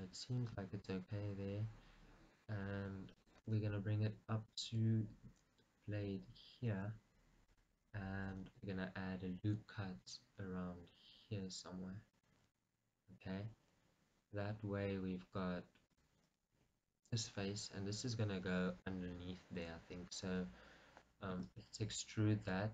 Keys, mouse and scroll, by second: 0.2 g, 3.4 click, 3.9 r, 4.8 click, 5.0 g, 7.7-9.8 drag, 12.4 click, 16.3-17.4 drag, 21.7 e, 22.0 right click.